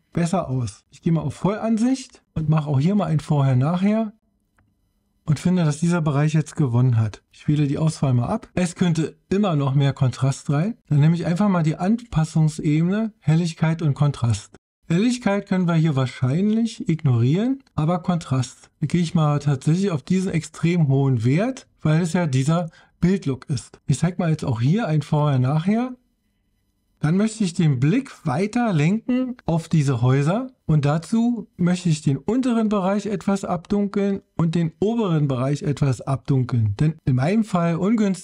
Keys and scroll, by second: 1.5 super+0, 8.1 super+d.